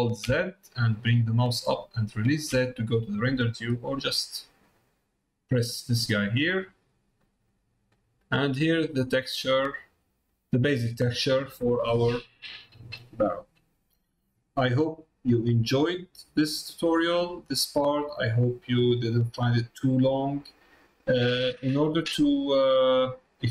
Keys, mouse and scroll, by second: 6.2 middle click, 6.9 middle click, 8.0 middle click, 8.8 middle click, 10.8 middle click, 22.8 middle click.